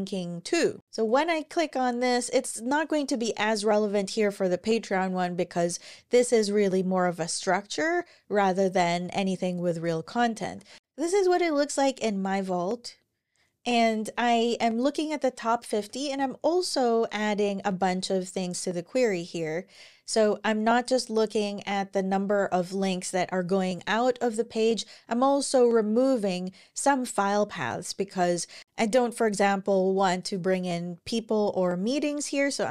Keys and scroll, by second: 9.8 super+`, 10.3 super+`, 15.5 scroll down 1.